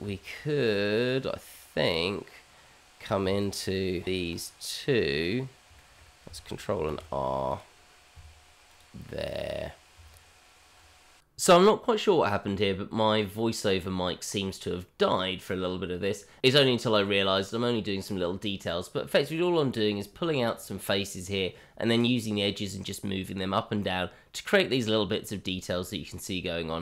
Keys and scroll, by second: 3.2 Tab, 6.9 ctrl+r, 10.7 Tab, 13.9 e, 15.0 Tab, 16.2 g, 17.3 shift+z, 18.1 g, 18.5 shift+z, 18.8 Tab, 19.9 Tab, 20.4 Tab, 21.2 Tab, 22.2 q, 22.6 Tab, 24.3 ctrl+r.